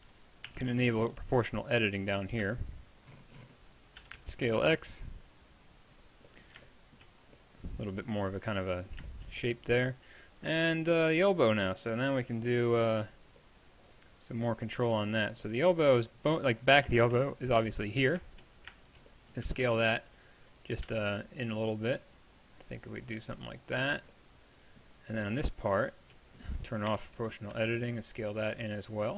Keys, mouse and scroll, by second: 0.5 o, 2.4 s, 4.0 s, 18.5 middle click, 19.5 s, 20.9 s, 26.9 o, 27.6 s.